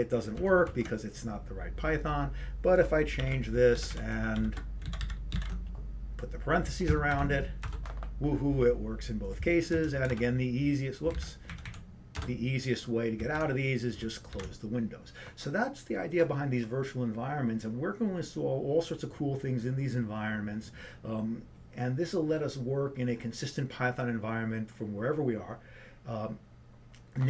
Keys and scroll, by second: 8.4-9.2 typing, 10.0 Up.